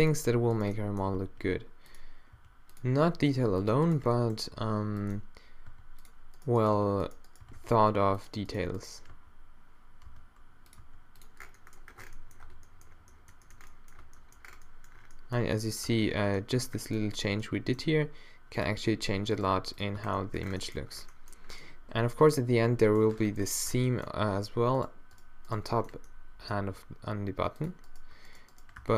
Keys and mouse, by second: 1.1 g, 2.4 g, 5.0 r, 5.7 g, 6.7 g, 8.1 g, 10.1 d, 10.8 r, 12.5 Tab, 12.7 middle click, 12.8 middle click, 14.0 Tab, 14.4 Tab, 14.9 middle click, 15.9 Tab, 16.5-17.8 middle drag, 17.8 g, 19.4 g, 20.0 Tab, 20.4 middle click, 23.7 Tab, 26.6-27.6 right drag, 26.6 g, 28.3 shift+right click, 28.8 q.